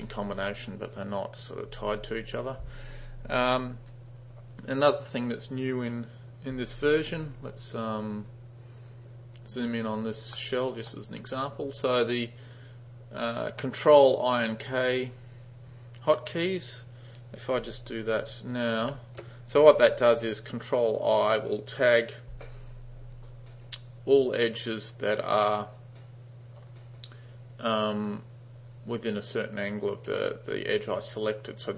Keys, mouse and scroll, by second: 10.4-10.9 middle drag, 13.2 middle click, 19.0 ctrl+i.